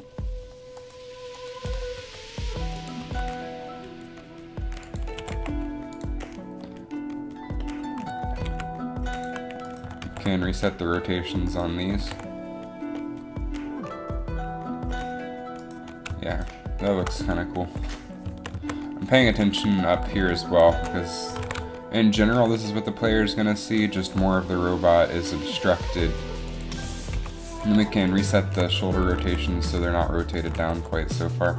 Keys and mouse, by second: 2.2 g, 3.1 r, 5.3 r, 8.4 g, 10.2 alt+r, 12.2 alt+r, 17.7 KP_3, 18.3 z, 18.6 z, 21.4 g, 24.5 g, 27.2 KP_1, 29.4 alt+r, 30.7 alt+r.